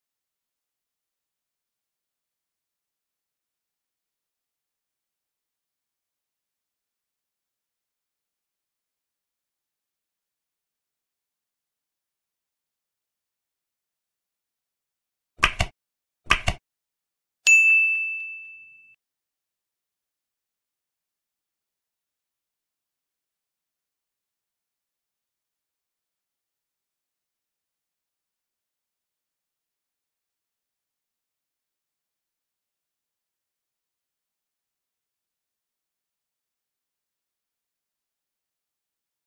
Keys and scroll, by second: 5.3 ctrl+s, 6.1 ctrl+s, 7.5 ctrl+c, 10.7 ctrl+s, 11.8 ctrl+c, 13.7 ctrl+s, 21.4 ctrl+s, 22.2 F9, 23.0 space, 23.6 ctrl+v, 23.9 ctrl+z, 24.4 ctrl+BackSpace, 25.0 ctrl+v, 25.7 space, 26.6 Left, 27.8 space, 28.8 Right, 30.0 space, 32.3 space, 33.6 F9, 34.8 ctrl+c, 36.1 ctrl+shift+Left, 36.5 ctrl+Right, 37.5 Right, 37.6 ctrl+BackSpace, 38.4 ctrl+Right.